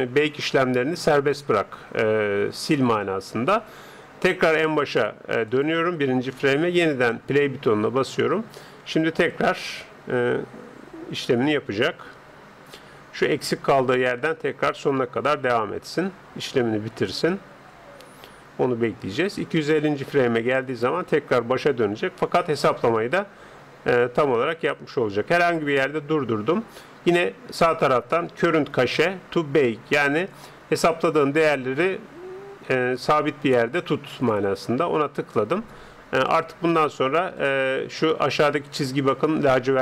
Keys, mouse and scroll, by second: 5.5-8.5 drag, 25.5-27.1 drag, 34.1-35.7 drag, 36.3-39.0 drag, 39.1 click.